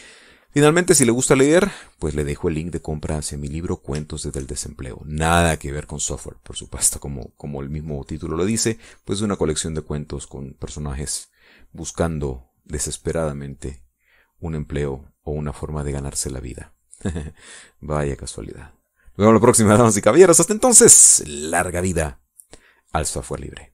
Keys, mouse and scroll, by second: 1.5 middle click, 1.9 middle click, 2.5 middle click, 3.0 middle click, 3.5 middle click, 3.8 middle click, 4.3 middle click, 5.6 shift+click, 6.4-11.9 drag, 12.1 middle click, 13.1 middle click, 13.2 click, 14.3-15.5 drag, 18.4-20.6 drag, 20.7-21.9 drag, 21.9-23.3 drag, 23.3 middle click.